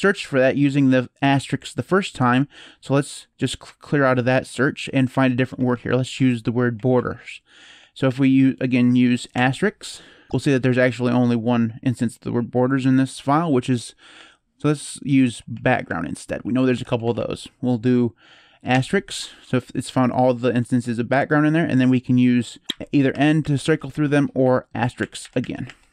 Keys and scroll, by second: 3.4 ctrl+s, 4.7-7.4 typing, 9.1 shift+8, 13.9-16.9 typing, 18.5 *, 22.6-23.7 typing, 24.7 *, 25.0 *, 25.2 *, 25.4 *.